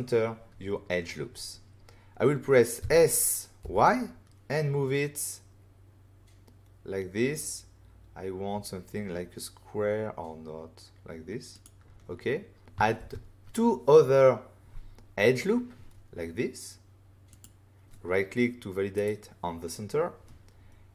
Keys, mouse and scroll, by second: 2.7 s, 3.6 y, 11.5 click, 12.9 ctrl+r, 15.0 scroll up 1, 17.3 click, 18.9 right click.